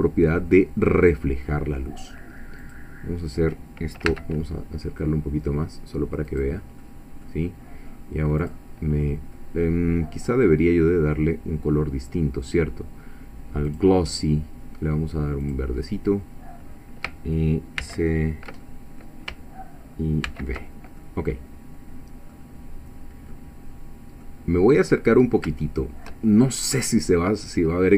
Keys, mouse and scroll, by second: 1.6-2.0 scroll down 1, 2.8 click, 4.1 g, 6.3 click, 6.8 middle click, 8.5 click, 9.0-9.3 scroll up 1, 13.6 click, 15.4 click, 17.8 ctrl+c, 18.6 ctrl+middle click, 20.2 ctrl+v, 21.0 ctrl+click, 21.4 middle click, 22.4 scroll up 2, 23.3-24.4 middle drag, 24.6-25.3 scroll up 2, 25.6 shift+middle click, 26.6-27.6 middle drag, 27.6 scroll up 2.